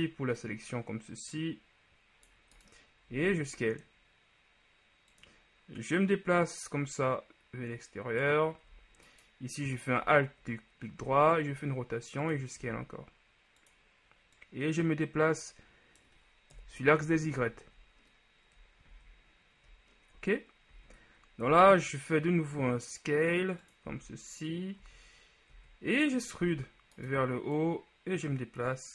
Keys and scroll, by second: 3.4 s, 11.1 r, 12.7 s, 16.9 KP_1, 17.5 z, 19.0 z, 20.8 z, 21.6 s, 24.0 z, 25.6 z, 26.5 e.